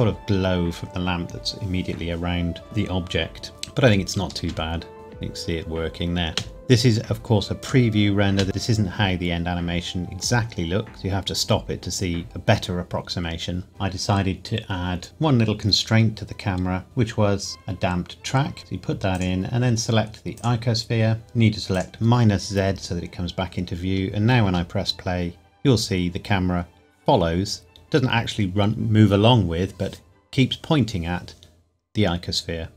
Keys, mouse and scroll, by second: 4.3 space, 6.3 space, 7.6 click, 8.3 space, 10.9 space, 13.7 click, 15.0 click, 16.8 click, 21.7 click, 25.0 space.